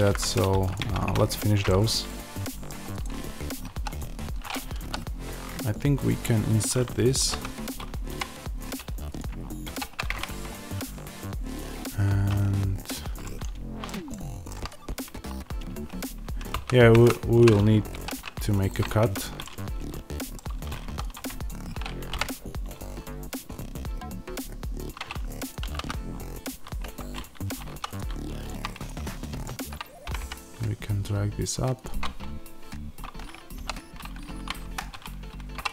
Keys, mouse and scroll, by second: 0.0 middle click, 0.6 click, 0.7 Tab, 1.2-1.6 scroll up 1, 1.6-2.8 middle drag, 2.8 click, 3.6 3, 3.8 click, 4.7 i, 7.0 click, 9.1 click, 9.5 ctrl+r, 13.1-20.9 middle drag, 16.4 ctrl+z, 19.0 Escape, 20.8 3, 20.9 click, 22.0 typing, 25.4 click, 25.5 s, 26.9 Escape, 27.6 2, 27.8 click, 30.0 g, 31.7 click, 33.4 i, 34.7 Escape, 35.4 3, 35.6 click.